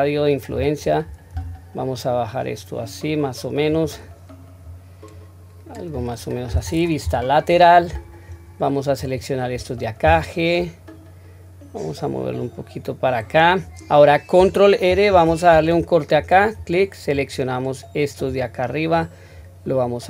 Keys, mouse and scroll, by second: 4.6 click, 7.0 KP_3, 8.3-9.0 drag, 10.0 g, 17.1-18.3 drag, 18.9-20.0 drag.